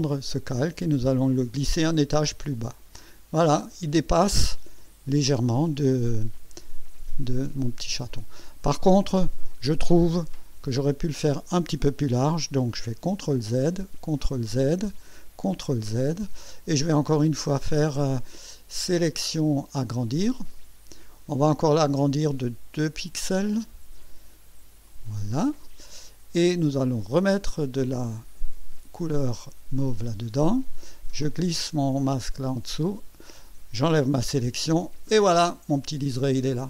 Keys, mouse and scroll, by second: 2.2 click, 4.7-5.2 scroll up 1, 5.9 ctrl+scroll up 1, 6.7-7.0 ctrl+scroll down 2, 13.1 ctrl+z, 13.9 ctrl+z, 15.4 ctrl+z, 19.0 click, 20.5 click, 24.9 click, 29.1 click, 32.1 click, 34.2 ctrl+shift+a.